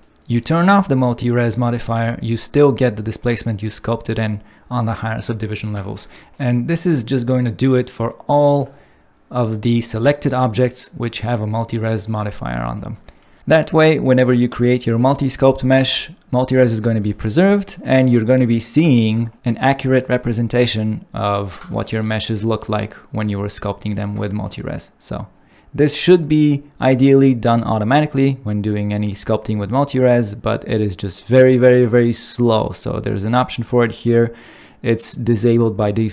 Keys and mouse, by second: 0.6 click, 0.9 click, 1.3-1.7 drag.